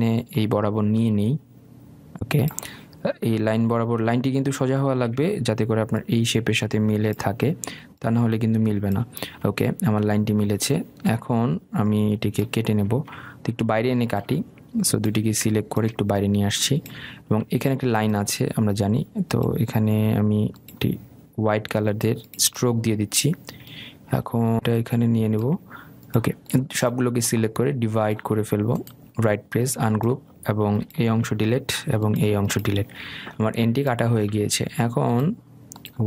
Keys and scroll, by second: 32.3 Delete.